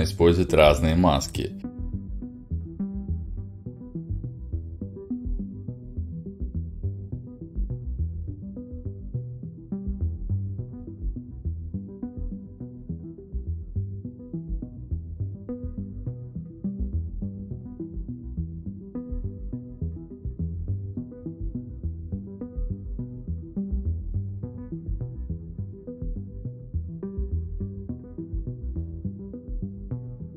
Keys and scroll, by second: 18.9 v, 21.0 c, 23.8 x, 27.3 y.